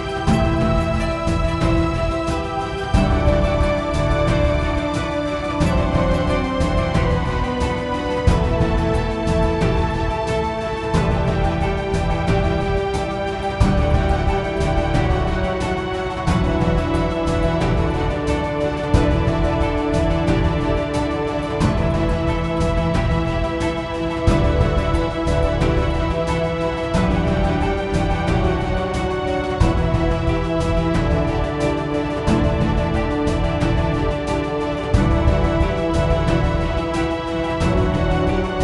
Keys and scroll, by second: 0.4-3.0 typing, 3.4 Return, 4.5-11.0 typing, 13.9-15.7 typing, 15.3 Return.